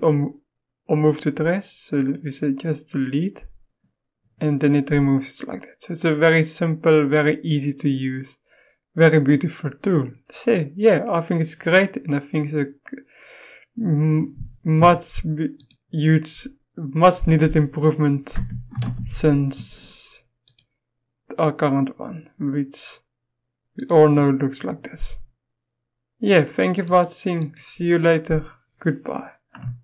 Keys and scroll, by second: 18.3-18.8 typing.